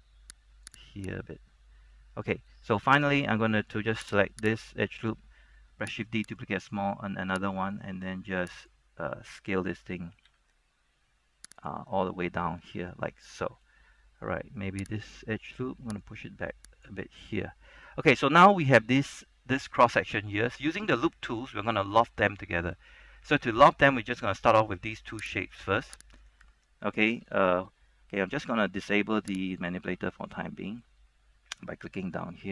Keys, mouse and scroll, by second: 0.8 click, 1.1 right click, 2.0 middle click, 2.0 scroll down 1, 2.8 scroll down 1, 3.2 scroll up 1, 6.4 right click, 6.4 shift+d, 7.9-9.2 drag, 10.4 s, 11.7 click, 12.0-14.0 middle drag, 14.0 scroll down 1, 14.3-15.0 scroll up 1, 15.0 alt+right click, 16.1 click, 17.1 scroll down 1, 17.5 middle click, 18.1 scroll up 1, 18.4 shift+middle click, 22.5 scroll down 1, 22.6 middle click, 23.1 shift+middle click, 24.2-25.4 scroll up 1, 25.5 alt+right click, 26.3 alt+right click, 29.7 click, 30.1 shift+middle click, 31.0 scroll up 1.